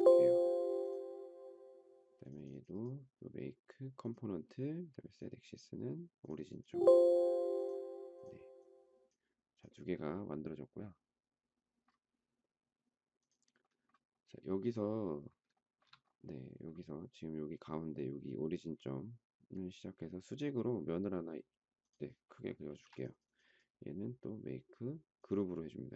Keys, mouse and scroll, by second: 15.5 shift+middle click, 22.7 space.